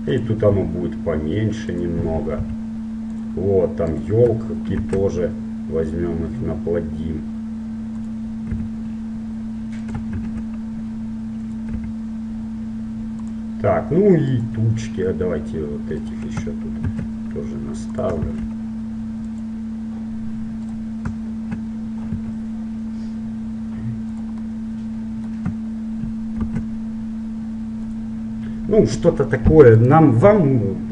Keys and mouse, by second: 0.8 s, 2.6 g, 4.0-5.9 right drag, 4.9 shift+d, 8.7 s, 10.4 shift+d, 12.1 s, 14.5-18.0 right drag, 17.0 shift+d, 18.5 shift+d, 20.7-22.6 right drag, 22.4 g, 24.7-26.7 middle drag, 26.7 shift+d, 30.1-30.9 right drag.